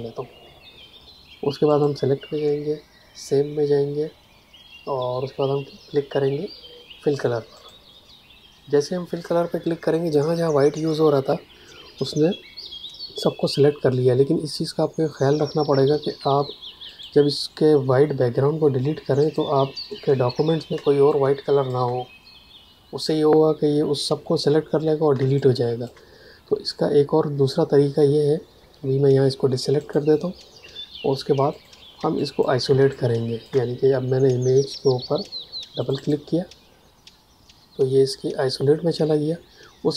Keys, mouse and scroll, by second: 1.6 click, 7.5 click, 15.6 space, 16.8 ctrl+alt+click, 19.1 ctrl+alt+click, 20.7 space, 21.0 click, 21.2 space, 25.1 space, 25.3 click, 25.6 space, 29.7 click, 30.6 v, 31.5 click, 31.9 space, 32.1 click, 32.4 space, 32.8 ctrl+click, 35.7 click, 39.8 a.